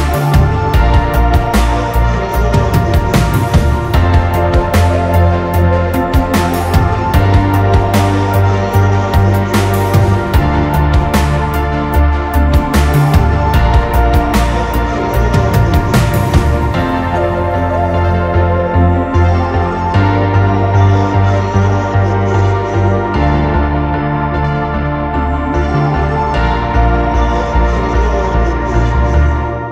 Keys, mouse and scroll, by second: 14.3 alt+click, 20.8 right click, 23.4 typing, 28.8-29.1 typing.